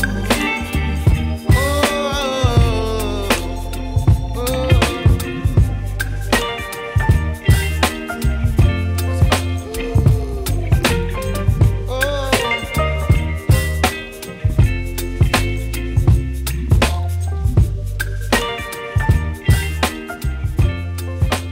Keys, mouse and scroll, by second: 0.5 click, 0.8 right click, 1.6-2.0 scroll down 1, 2.0-3.4 scroll up 1, 3.4-7.7 drag, 8.0-8.7 scroll up 1, 8.7 scroll down 1, 9.7 right click, 10.1-10.5 scroll up 1, 10.5 click, 11.7 right click, 12.0 scroll down 1, 12.2 scroll up 1, 16.8 Return, 17.0 scroll down 1, 17.2-17.9 scroll up 1, 17.9 click, 19.0 2, 19.2 Return.